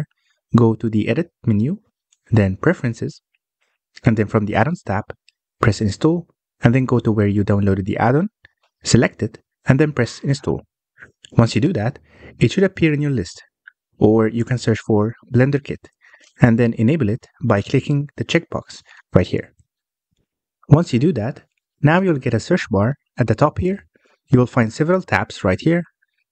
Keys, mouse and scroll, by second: 1.3-4.5 drag, 24.7-26.3 middle drag.